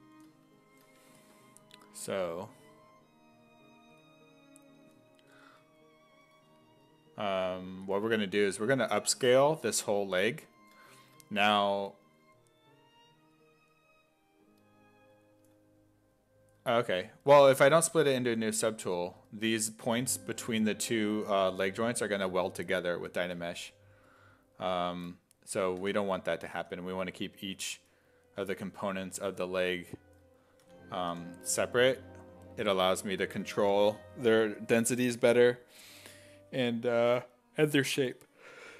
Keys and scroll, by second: 5.3 w, 25.9 f, 26.6 f, 28.6 1, 30.7 d, 31.1 d.